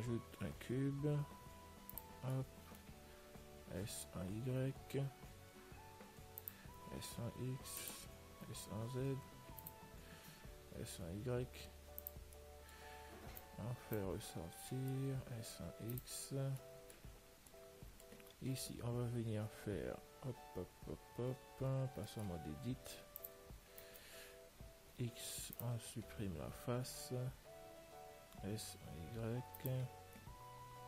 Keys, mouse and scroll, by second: 0.5 shift+a, 2.6-4.6 middle drag, 3.9 s, 7.0 s, 12.6-14.4 middle drag, 13.7 click, 15.1 s, 18.4-21.9 middle drag, 21.9 Tab, 22.4-23.5 middle drag, 23.5 click, 24.1 middle click, 24.1 right click, 25.2 click, 25.2 x, 25.5 right click, 27.6 a, 28.5 s.